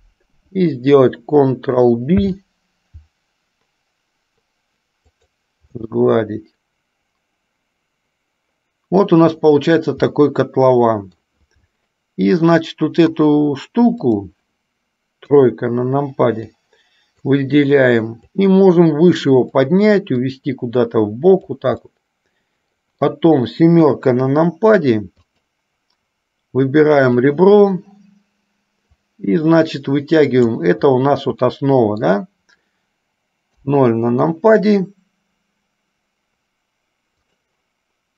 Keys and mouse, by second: 2.3 ctrl+b, 6.1-9.2 middle drag, 10.3-11.3 middle drag, 14.3 click, 15.4 KP_3, 16.6 click, 18.4-19.8 drag, 20.4-21.8 drag, 22.1-23.3 middle drag, 24.1 KP_7, 25.4 click, 27.2 click, 29.3-30.8 drag, 31.7 middle click, 33.7 KP_0, 37.8 click.